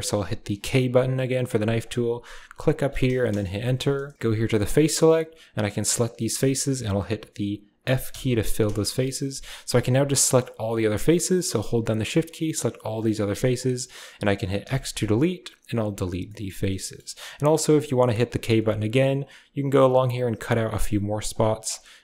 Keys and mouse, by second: 4.5 click, 7.9 f, 8.7 shift+middle click, 9.5 click, 10.6 shift+click, 11.3 shift+click, 12.1 shift+click, 12.8 shift+click, 14.5 x, 15.7 typing, 16.1 shift+middle click, 16.8 shift+click, 18.0 k.